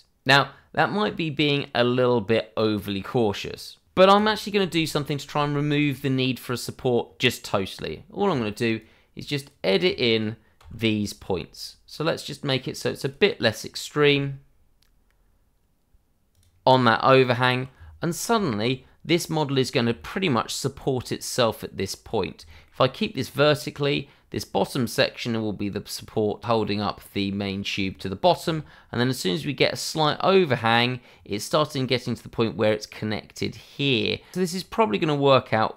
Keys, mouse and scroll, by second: 4.1 click, 7.7 Tab, 8.7 click, 10.6 g, 13.0 click, 14.0 g, 16.3 click, 17.1 scroll up 1, 17.7-18.0 scroll down 1, 18.4 shift+middle click, 19.3 scroll up 1, 19.9 shift+middle click, 22.5 shift+middle click, 22.9 scroll down 1, 23.2-24.0 scroll up 1, 27.8 shift+middle click.